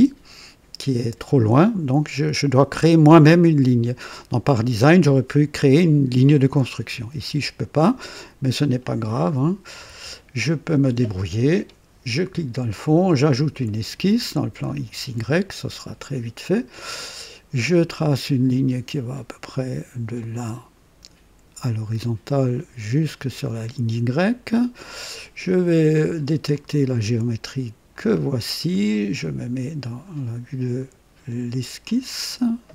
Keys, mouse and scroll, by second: 3.7-4.2 typing, 6.8-8.2 typing, 9.1 click, 9.8 typing, 12.1 click, 13.0 click, 14.6 click, 17.8 click, 20.2 click, 23.1 click, 24.1 scroll up 2, 24.8 right click, 26.5 click, 27.9 click, 29.8 click, 31.8 click, 32.6-32.7 scroll up 2.